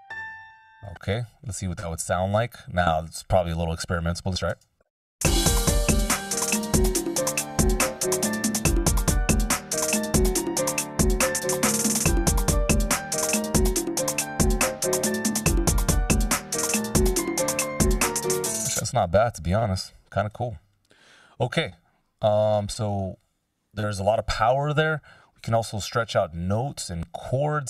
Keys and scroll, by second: 0.2 space, 4.4 Delete, 5.1 space, 18.1 space, 20.5 Delete.